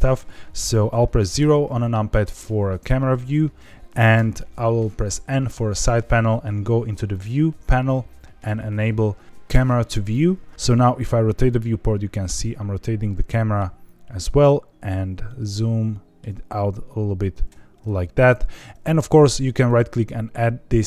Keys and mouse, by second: 1.3 KP_0, 4.1 n, 7.1 click, 9.9 click, 10.6-11.8 middle drag, 11.8 click, 12.5-13.5 middle drag, 19.7-20.8 drag.